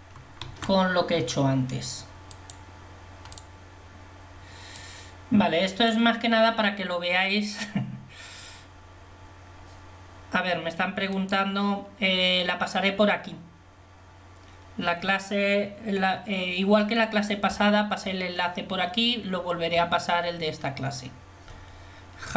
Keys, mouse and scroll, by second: 0.6 shift+a, 5.0-6.0 drag.